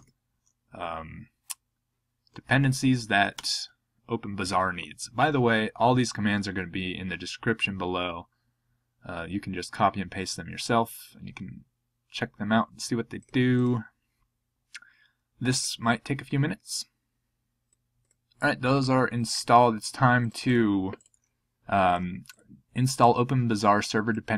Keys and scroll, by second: 3.3 Return.